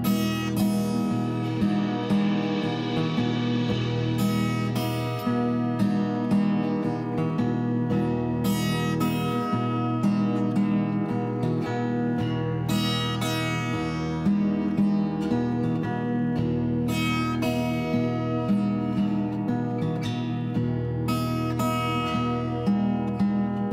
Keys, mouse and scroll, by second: 0.2 z, 0.9 2, 1.5 Return, 2.5 g, 2.9 z, 3.2 1, 3.5 Return, 4.4 middle click, 7.0 click, 7.5 click, 8.1 click, 8.8 click, 9.4 s, 9.5 z, 11.7 click, 13.2 click, 13.9 click, 14.5 s, 14.7 x, 18.4 click, 20.5 middle click, 22.3 click, 23.0 shift+s, 23.1 k.